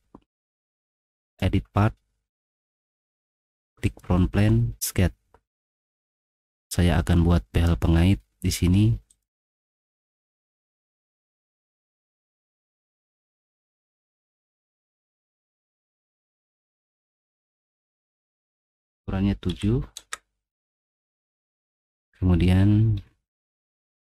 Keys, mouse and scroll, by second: 0.9 click, 2.6 scroll down 2, 3.8 click, 5.8 middle click, 5.8-7.1 scroll down 8, 6.3 middle click, 6.6 middle click, 6.8 middle click, 9.1 click, 10.5 click, 11.8 click, 12.9 click, 13.5 click, 13.6 click, 14.2 middle click, 15.9 click, 17.0 click, 17.7 click, 19.5 7, 20.0 Return, 21.8 click, 22.3 middle click, 22.8 middle click, 23.0 middle click, 23.5 click.